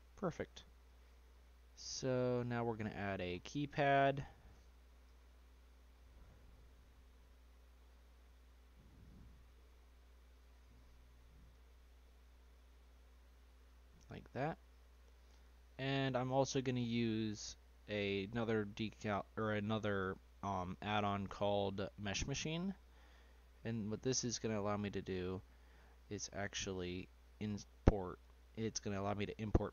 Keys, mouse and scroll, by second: 2.7 click, 3.3-3.7 scroll up 3, 3.7-5.0 shift+middle drag, 5.0 d, 9.5 s, 10.8 scroll up 1, 10.8-13.6 middle drag, 13.6 click, 14.9 click, 18.4 y, 28.8 s.